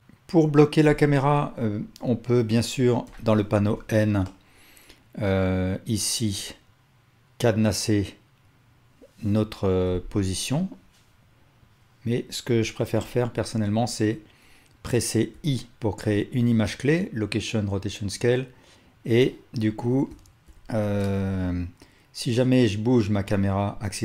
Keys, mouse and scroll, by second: 0.8 KP_0, 3.1 n, 4.4 click, 6.4-13.8 drag, 13.1 n, 19.1-20.5 drag, 20.6 shift+F12, 20.6-24.0 shift+drag.